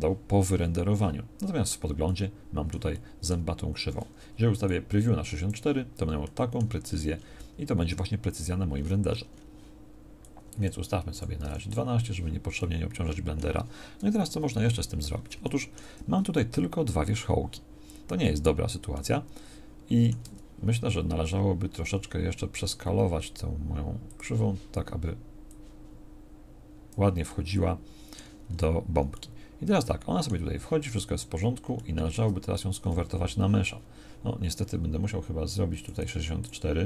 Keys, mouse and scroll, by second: 14.3 KP_1, 20.2 Tab, 22.6 s.